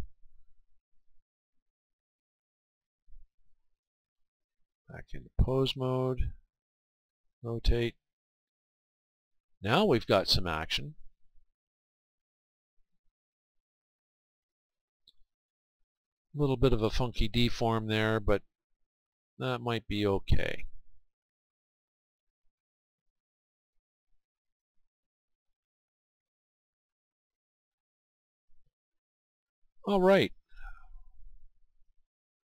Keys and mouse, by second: 1.0 r, 2.7 r, 3.2-5.1 right drag, 4.7-7.2 drag, 7.2 r, 8.5 r, 20.7-23.6 right drag, 28.1-30.0 right drag, 30.7-32.5 right drag.